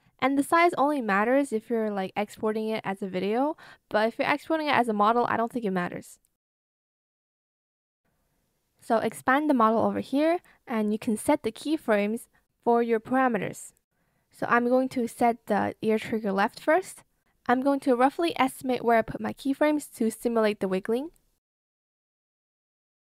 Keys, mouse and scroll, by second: 1.3 ctrl+alt+shift+click, 2.1 shift+click, 3.5 alt+shift+click, 4.6 shift+click.